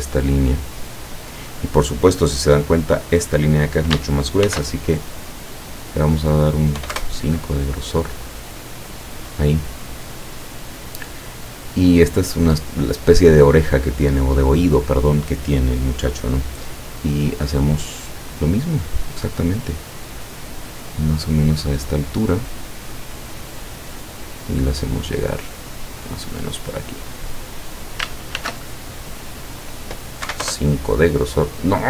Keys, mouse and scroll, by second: 0.9 click, 4.5 ctrl+shift+f, 5.4 click, 6.8 KP_5, 7.0 KP_Enter, 8.6 click, 23.4 click, 27.0 click, 28.6 ctrl+shift+f, 29.5 click, 30.3 KP_5, 30.5 KP_Enter.